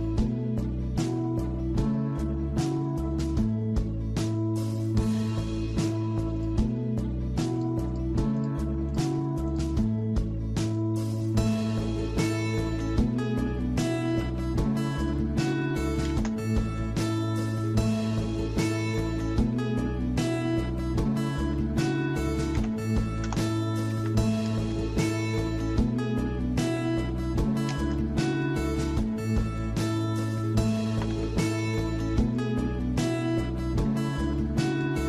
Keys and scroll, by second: 15.3-16.2 typing, 22.3-23.7 typing, 23.9 Escape, 26.7-27.1 typing, 29.9 Escape, 30.7-31.4 typing.